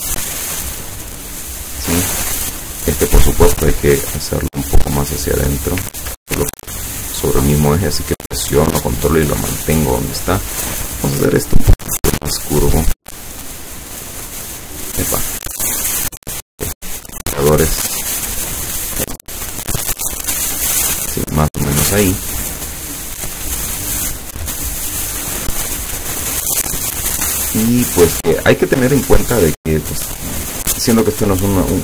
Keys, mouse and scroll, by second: 3.3 click, 3.8-6.0 drag, 6.0 ctrl+z, 6.8-10.3 ctrl+drag, 11.3-12.7 drag, 13.0 click, 13.6-14.9 drag, 16.6 click, 18.0-21.2 drag, 22.9 click.